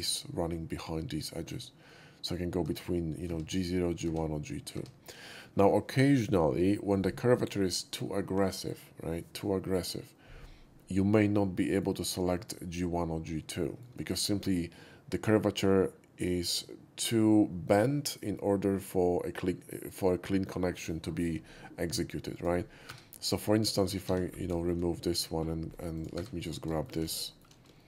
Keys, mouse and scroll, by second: 1.1-1.4 middle drag, 1.8-2.3 middle drag, 2.6 Tab, 11.3-11.8 middle drag, 12.2 shift+middle click, 13.6 shift+middle click, 22.3 click, 22.9 3, 23.2 right click, 23.6 click, 24.0 x, 24.5 shift+x, 24.5 middle click, 25.1 click, 25.1 shift+x, 25.3-25.9 scroll down 1, 25.9 click, 26.1 4, 26.3 click, 26.7 middle click, 27.0 middle click, 27.2 middle click, 27.7 middle click.